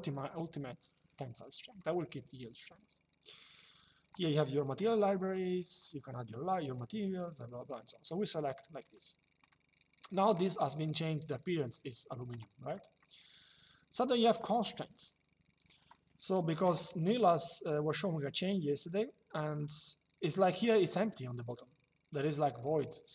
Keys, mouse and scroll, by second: 1.5 click, 4.4 click, 8.6 click, 12.5 middle click, 17.0 shift+middle click, 22.9 shift+middle click.